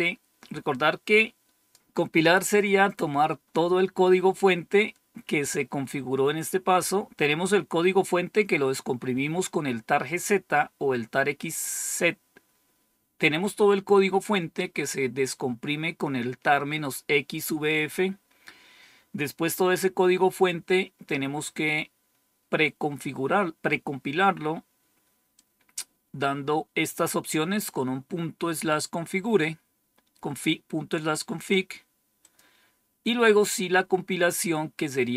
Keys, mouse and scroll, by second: 25.2-26.8 drag, 32.1 click.